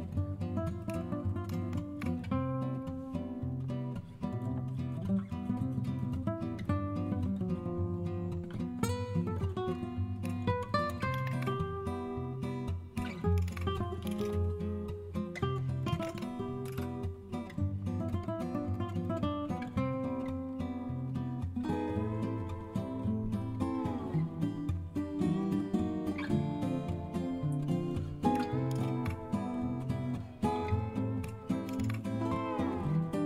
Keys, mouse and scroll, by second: 1.4 super+a, 11.1 super+h, 13.3 super+d, 13.8-16.5 typing, 16.6 Return, 28.7 super+v, 31.6 super+d, 33.1-33.2 typing.